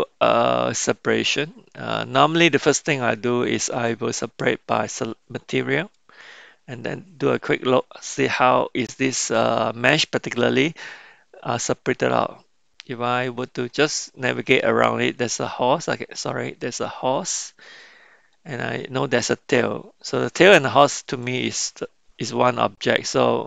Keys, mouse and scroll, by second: 8.3 Tab, 12.2-13.4 middle drag, 14.8 click, 18.4 click.